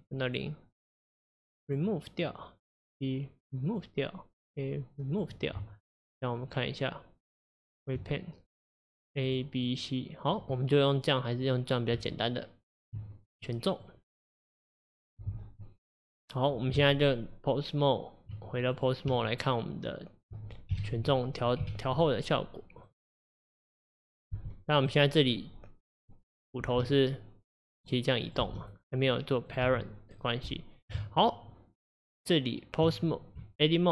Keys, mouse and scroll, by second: 1.7-2.9 drag, 3.8-4.4 drag, 5.2-8.0 drag, 8.0 Tab, 9.2 click, 9.7 click, 10.6-13.0 middle drag, 13.0 Tab, 13.5 middle click, 14.0-14.7 scroll down 2, 18.8 click, 20.3 Tab, 20.7 KP_1, 21.6 KP_3, 22.2-22.7 scroll up 2, 22.9 click, 24.4 g, 26.1 click, 26.7 g, 28.3 click, 28.5 g, 29.5 click, 29.7 g.